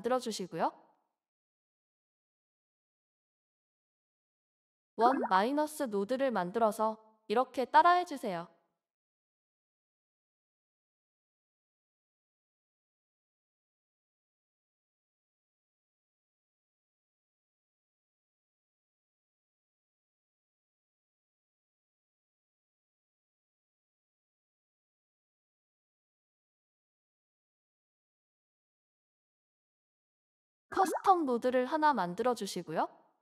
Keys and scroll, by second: 0.2-0.8 typing, 4.5-5.6 typing, 30.5-33.2 typing.